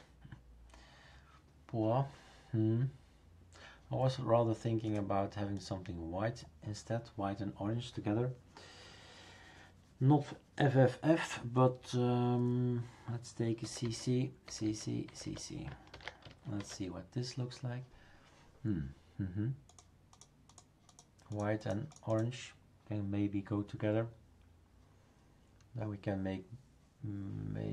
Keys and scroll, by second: 13.6 typing, 14.7-15.2 typing, 15.9 ctrl+s.